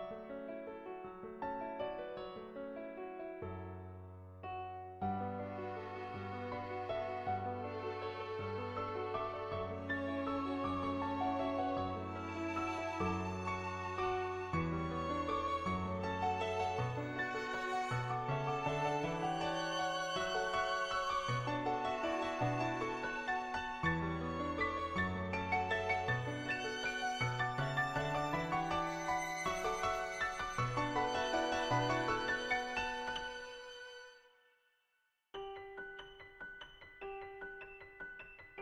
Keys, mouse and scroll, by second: 0.0 click, 3.4 ], 3.7 ], 4.0 click, 4.9 [, 5.3 [, 5.4 click, 6.8 ctrl+z, 7.0 [, 7.2 click, 7.7 ctrl+z, 7.7 ], 7.8 ], 8.0 click, 8.5 ctrl+z, 8.5 ], 8.7 click, 9.8 ctrl+z, 10.1 click, 10.1 ], 11.0 ctrl+z, 11.3 ], 11.7 ], 12.0 click, 13.3 [, 13.6 click, 14.9 [, 15.1 click, 16.1 [, 16.3 click, 18.3 [, 18.6 [, 18.9 click, 21.1 middle click, 21.6-23.1 middle drag, 24.6 middle click, 26.2 click, 28.0 click, 31.8 click, 32.6 ctrl+z, 34.5 click, 36.3 ctrl+z, 36.5-38.6 typing, 37.1 click, 37.5 click, 38.2 click, 38.5 click.